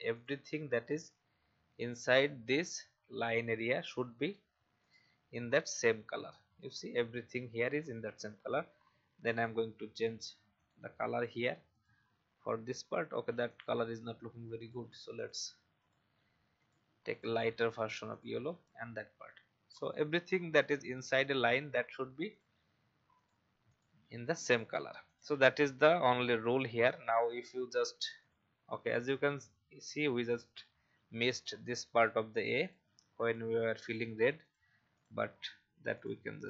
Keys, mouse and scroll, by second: 0.8-1.9 scroll down 1, 1.9 click, 2.4 alt+scroll down 1, 4.2-34.9 drag, 35.2-35.9 scroll down 1, 35.9 click.